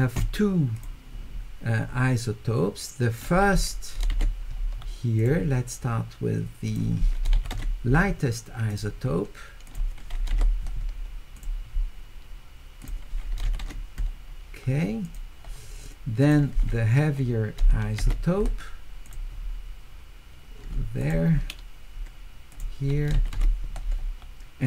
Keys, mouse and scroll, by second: 0.8 click, 3.2 click, 5.2 click, 6.7 click, 7.3 q, 8.7 click, 9.7 click, 11.4 click, 12.8 click, 13.4 q, 15.0 click, 16.2 click, 19.0 click, 21.0 click, 22.5 click, 23.1 q.